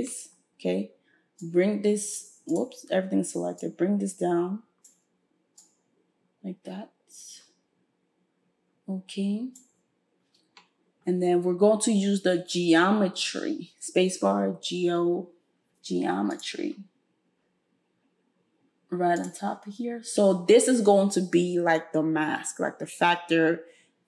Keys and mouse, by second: 2.6-3.6 middle drag, 3.6-19.3 drag, 13.3 space, 19.3-24.0 middle drag.